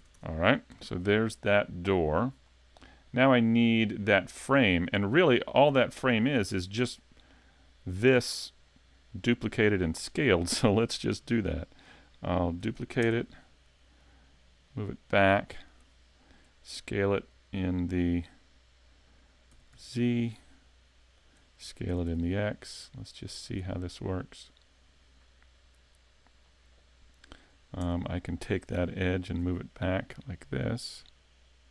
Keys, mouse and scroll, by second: 0.0 a, 0.1 Tab, 0.4 scroll down 3, 0.8 middle click, 2.5 scroll up 2, 4.6 middle click, 8.1 middle click, 9.3 middle click, 10.3 middle click, 12.6 shift+d, 14.7 click, 19.5 s, 21.3 click, 21.9 s, 23.6 click, 23.7 middle click, 27.5 scroll up 3, 27.8 Tab, 28.1 middle click, 29.2 alt+right click, 30.1 click.